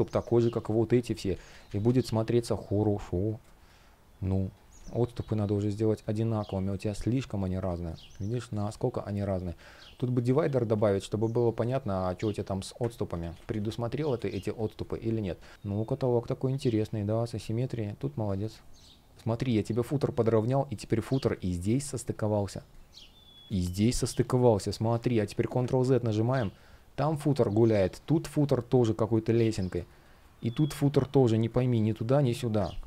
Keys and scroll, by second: 0.8 super+z, 3.1 space, 4.7 shift+p, 7.4 super+z, 8.3 space, 12.8 super+z, 13.9 space, 17.1 space, 19.1 space, 22.2 space, 24.3 space, 25.5 super+z, 29.5 space, 32.5 super+z.